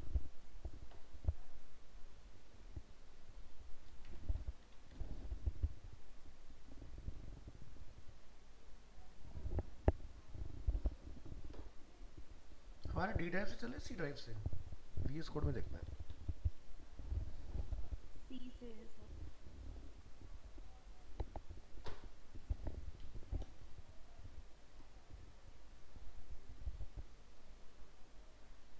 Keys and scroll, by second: 23.6 ctrl+c.